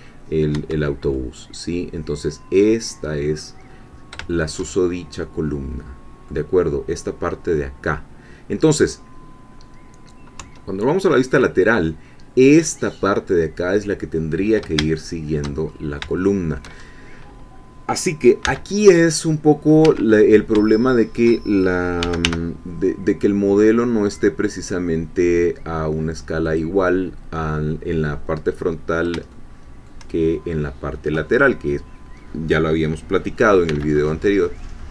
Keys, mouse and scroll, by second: 1.1-3.4 middle drag, 3.6-4.2 scroll up 1, 4.3 shift+middle click, 4.8 shift+middle click, 4.9 shift+scroll down 1, 5.2-6.7 drag, 10.4 3, 14.2 middle click, 14.2-14.6 scroll down 2, 15.0 shift+click, 15.2 shift+middle click, 15.2 shift+click, 15.6-16.0 shift+scroll up 2, 16.2 shift+middle click, 16.8 shift+scroll down 2, 17.9-18.4 scroll down 2, 18.4 c, 19.0 middle click, 19.8 Escape, 20.2-20.5 scroll up 1, 20.7 shift+middle click, 21.2 shift+scroll up 2, 21.8-22.7 typing, 26.4 click, 29.3-30.5 shift+middle drag, 33.6 c, 33.9-34.9 drag.